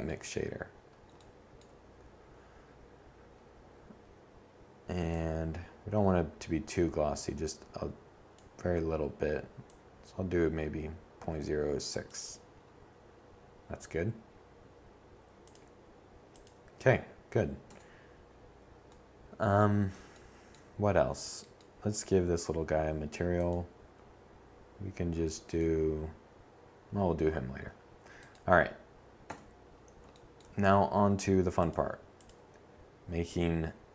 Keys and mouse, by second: 2.9-4.7 drag, 5.5 middle click, 6.0 middle click, 6.6 middle click, 15.5 Tab, 20.0-21.2 drag, 27.1 7.